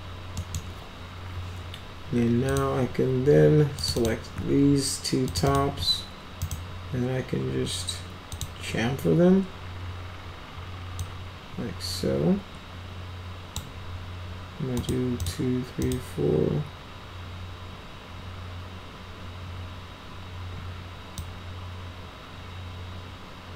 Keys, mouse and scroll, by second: 0.3 middle click, 2.4 click, 3.7 click, 3.9 click, 5.2 ctrl+click, 5.4 ctrl+click, 6.4 right click, 8.2 click, 10.9-13.5 drag, 14.7 click, 15.1 click, 15.7 click, 21.1-23.5 drag.